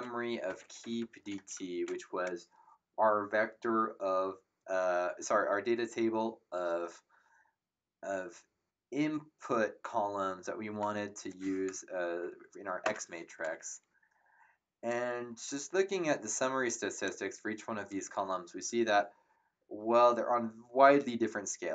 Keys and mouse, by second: 0.0-1.8 typing, 12.8 ctrl+Return, 14.9 click.